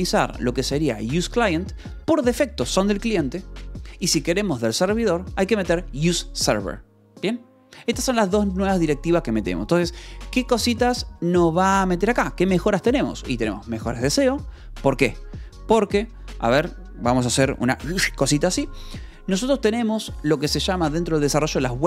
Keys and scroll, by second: 8.4 Escape, 10.0 j, 11.2 shift+k, 11.5 Escape, 12.5 shift+j.